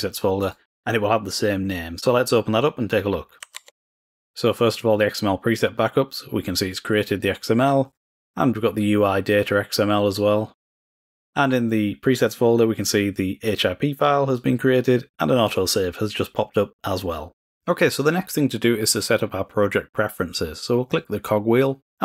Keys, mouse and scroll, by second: 1.0 click, 3.6 alt+s, 5.1 click, 6.7-8.4 drag, 12.0 click, 20.4 click.